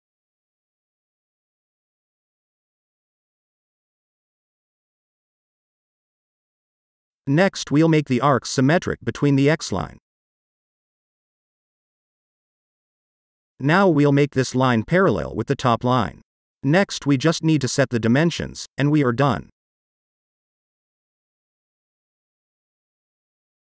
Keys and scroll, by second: 0.0-0.7 typing, 1.6 Return, 11.3 s, 15.3 shift+p, 18.6 shift+d, 20.0 8, 21.2 Return.